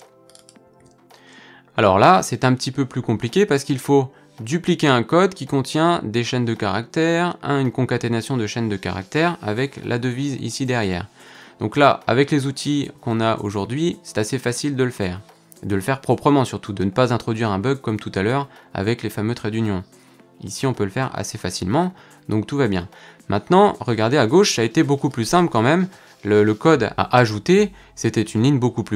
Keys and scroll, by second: 0.8 super+v.